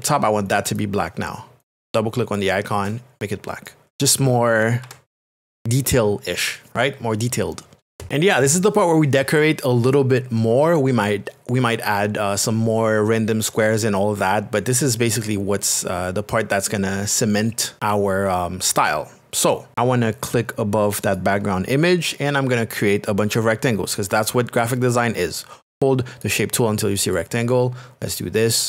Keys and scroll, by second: 4.8 ctrl+KP_Subtract.